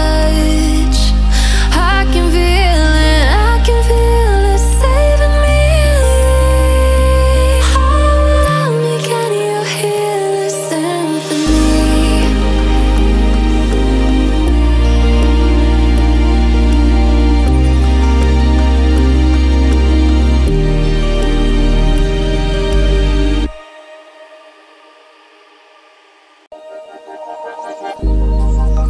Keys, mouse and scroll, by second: 0.6 click, 1.2 alt+scroll up 1, 1.6-1.9 alt+scroll down 1, 1.9 alt+scroll up 1, 4.4 click, 6.1 F7, 6.2-10.4 typing, 10.8 click, 12.4 click, 15.0 click, 18.3 click, 20.1 alt+scroll up 2, 20.8 click, 22.9-25.9 drag, 24.1-25.8 drag, 25.9-26.8 alt+scroll down 2, 26.8-27.3 alt+scroll up 2, 27.3 alt+scroll up 1, 27.4 click, 28.0-28.4 alt+scroll down 1, 28.4-28.7 alt+scroll up 1.